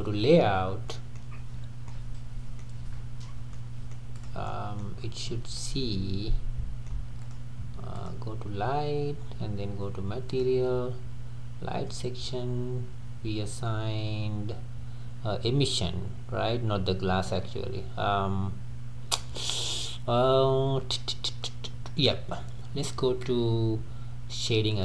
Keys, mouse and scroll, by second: 0.0 click, 0.6 scroll down 2, 0.9-1.3 middle drag, 1.3-1.8 scroll up 6, 1.8-3.3 middle drag, 3.3 scroll down 2, 3.5-4.2 middle drag, 4.2 drag, 4.5-5.0 middle drag, 5.0-5.6 scroll up 3, 5.6-7.2 middle drag, 7.2 click, 8.3 click, 12.6 click.